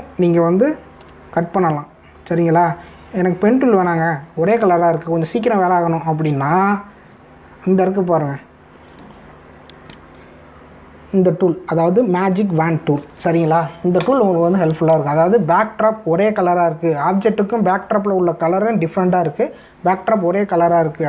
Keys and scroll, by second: 2.0 p.